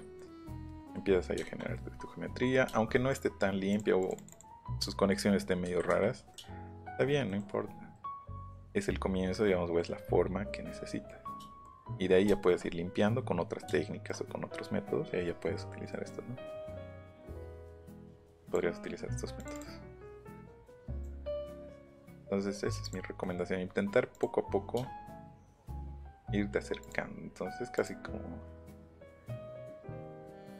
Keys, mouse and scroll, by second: 0.1 middle click, 0.7 middle click, 1.4 shift+middle click, 2.5 shift+middle click, 2.9 shift+middle click, 3.7 click, 4.3 click, 5.7 Escape, 7.9 middle click, 8.5 middle click, 9.3 middle click, 10.7 scroll up 1, 10.8 middle click, 17.5 click, 17.7 scroll up 1, 18.4 click, 18.8 scroll up 1, 19.4 click, 19.9 scroll up 1, 20.9 click, 21.3 middle click, 21.5 middle click, 22.0 middle click, 22.8 click, 24.1 click, 25.8 shift+click, 26.8 shift+click, 27.7 shift+click, 29.6 shift+click.